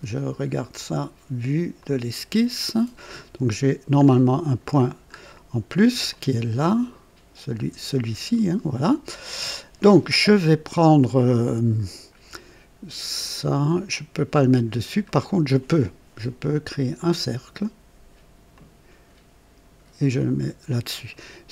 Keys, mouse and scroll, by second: 1.8 click, 2.6-3.0 scroll down 2, 3.1 right click, 4.0 scroll up 2, 4.8-5.9 scroll down 2, 6.1-7.7 ctrl+alt+drag, 9.4 click, 15.0 right click, 16.9 click, 18.5 click, 20.1 click, 20.9 right click.